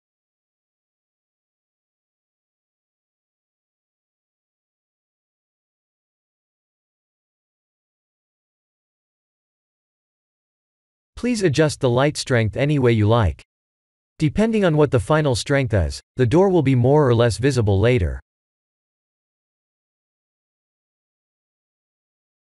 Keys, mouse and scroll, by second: 3.7 click, 6.7 click, 7.7 click, 10.6 click, 11.7 click, 12.3 1, 12.6 1, 14.9 click, 15.4 1, 15.8 1, 20.2 click, 21.0 click.